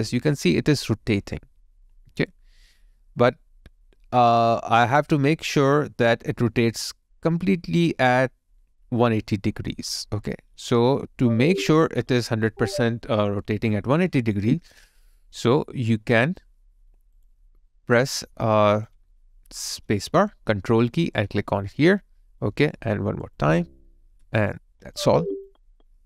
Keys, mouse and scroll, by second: 16.2 alt+right click, 18.3 alt+click, 19.9 space, 21.6 ctrl+click.